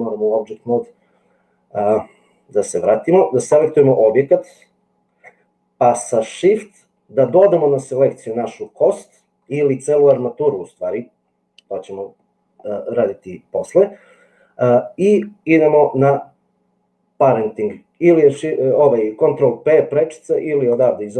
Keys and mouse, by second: 3.5 click, 8.6 shift+click, 20.7-21.1 drag.